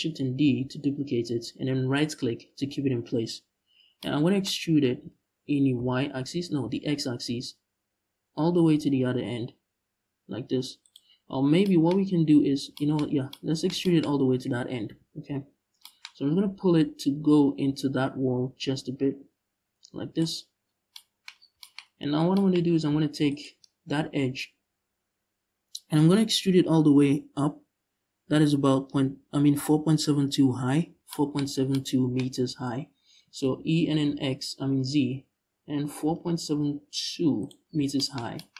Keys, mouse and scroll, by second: 0.1 shift+d, 1.7 right click, 4.6 e, 10.6 shift+click, 12.7 scroll up 2, 13.7 scroll up 2, 14.5 KP_Decimal, 15.2 scroll down 2, 16.6-22.9 drag, 20.0-20.6 scroll down 2, 21.0 scroll down 2, 21.7 scroll down 2, 22.3-22.9 scroll up 2, 22.9 alt+right click, 32.5-32.8 scroll down 2, 32.8 e, 37.1 shift+click, 37.3-37.6 scroll down 2, 38.3 scroll up 2, 38.4 Tab.